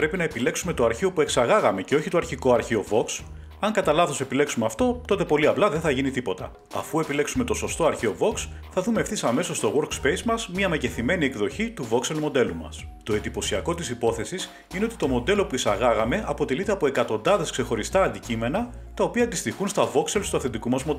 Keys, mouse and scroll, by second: 1.3 click, 3.2 click, 7.1 click, 8.9 click, 10.7 scroll, 12.1 scroll up 10, 14.3 middle click, 15.4 shift+middle click, 15.7-16.2 scroll up 1, 16.3 middle click.